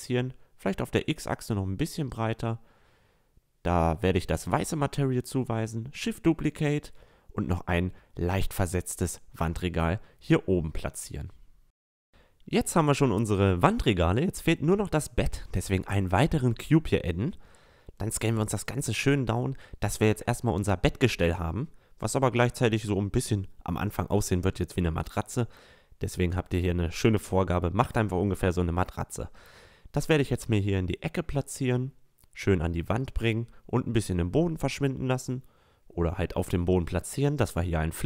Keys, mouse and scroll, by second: 0.1-3.7 drag, 3.8 shift+d, 4.7-5.4 drag, 6.7 click, 7.7-8.2 middle drag, 10.9 a, 11.4-12.9 middle drag, 13.9 middle click, 14.7 s, 15.6 click, 18.4-21.6 drag, 19.4 s, 21.9 s, 25.9-26.6 middle drag, 26.6-28.4 drag, 28.4-29.0 middle drag, 29.0-30.5 drag, 31.0 middle click, 33.4-34.9 drag, 35.1 click, 35.3-36.2 middle drag, 36.2-38.0 drag.